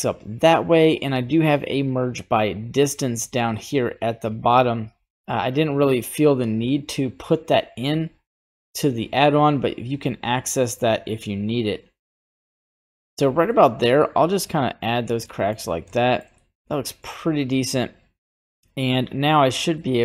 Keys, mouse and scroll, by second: 1.9 click, 2.5 scroll down 1, 4.9-5.5 scroll down 3, 5.5-7.6 drag, 11.2-13.1 drag, 13.5 middle click, 14.9 scroll up 1, 15.2 middle click, 15.9 shift+middle click, 16.3 middle click, 18.0 click, 19.8 middle click.